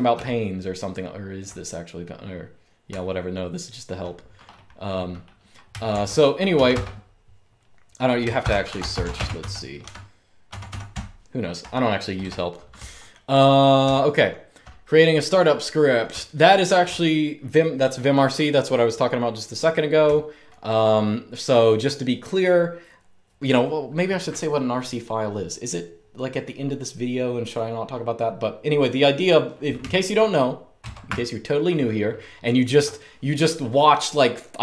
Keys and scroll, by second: 0.0-1.2 typing, 2.3-3.5 typing, 5.6-6.7 typing, 8.1-13.4 typing, 15.5-16.3 typing, 19.7-20.1 typing, 30.5 super+Return.